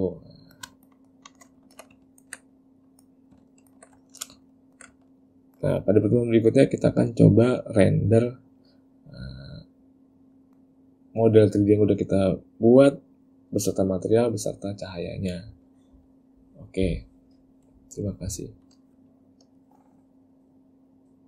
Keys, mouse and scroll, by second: 0.3 middle click, 0.9 ctrl+middle click, 1.1 ctrl+middle click, 1.4 ctrl+middle click, 1.7 shift+middle click, 2.2 ctrl+middle click, 2.7 middle click, 3.6 ctrl+middle click, 4.1 shift+middle click, 4.6 ctrl+middle click, 5.1 shift+middle click, 10.5 middle click.